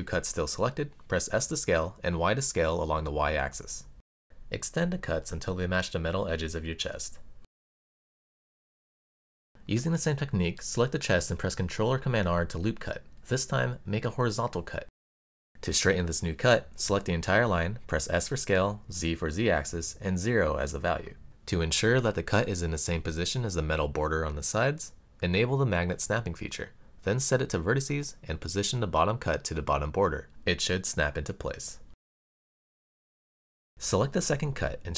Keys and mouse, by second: 2.2 s, 4.2 y, 7.4 click, 7.9 middle click, 8.8 super+z, 8.8 super+r, 10.7-11.7 drag, 16.9 alt+click, 18.8 s, 19.4 z, 20.4 KP_0, 20.6 Return, 22.7 click, 23.5-25.3 drag, 27.2 g, 31.1 click, 32.3-33.6 middle drag, 34.4-34.9 middle drag.